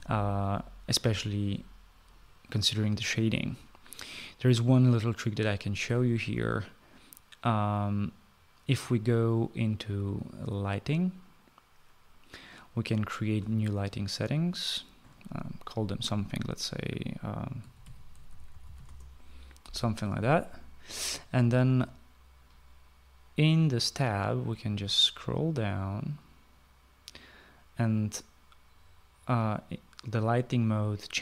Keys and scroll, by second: 17.3-19.2 typing.